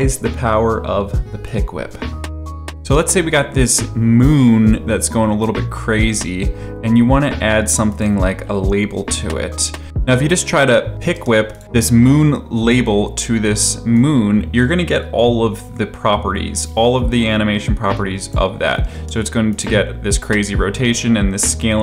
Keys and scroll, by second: 2.6 space, 11.1 space, 18.9 space.